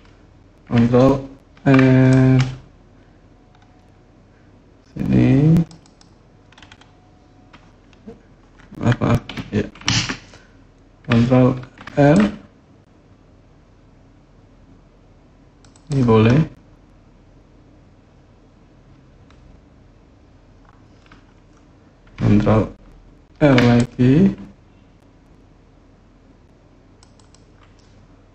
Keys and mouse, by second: 1.3 ctrl+r, 5.6 click, 9.6 ctrl+z, 11.4 ctrl+r, 15.5 click, 23.1 ctrl+r, 26.9 click.